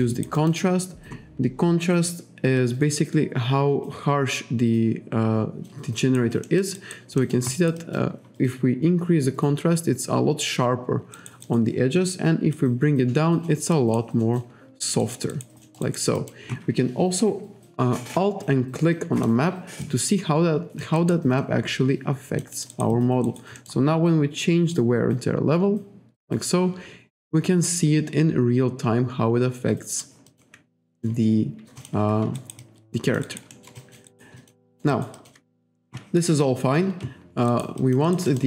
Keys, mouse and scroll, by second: 0.1 alt+right click, 2.6 click, 6.0 alt+right click, 6.5 alt+middle click, 6.8 alt+right click, 7.2 alt+middle click, 7.6 alt+right click, 7.8 alt+click, 11.2 alt+right click, 12.6 click, 13.8 alt+right click, 14.2 alt+middle click, 15.0 alt+right click, 15.3 alt+right click, 15.7 alt+middle click, 15.9 alt+right click, 16.2 alt+click, 19.2 alt+click, 19.9 alt+click, 21.4 alt+click, 22.6 alt+middle click, 22.7 alt+right click, 22.9 alt+click, 23.3 alt+right click, 23.6 alt+middle click, 24.8 click, 30.3 alt+click, 31.0 click, 31.4-31.8 scroll up 1, 31.8 click, 32.4 alt+right click, 32.6 alt+click, 33.3 alt+right click, 33.7 alt+scroll up 1, 33.8 alt+click, 34.4 alt+click, 34.7 alt+middle click, 34.9 alt+right click, 35.2 alt+click, 37.5 alt+right click, 37.8 alt+click, 38.1 alt+right click, 38.3 alt+middle click.